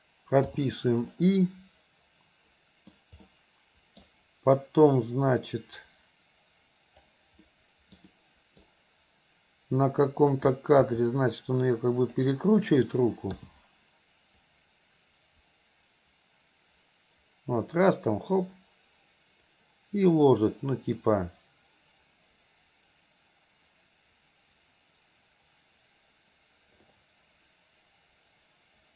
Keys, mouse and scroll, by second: 1.2-3.0 middle drag, 3.3-4.1 middle drag, 5.0-7.2 drag, 7.5-8.0 middle drag, 8.1-8.6 middle drag, 10.9 r, 14.5-28.9 drag.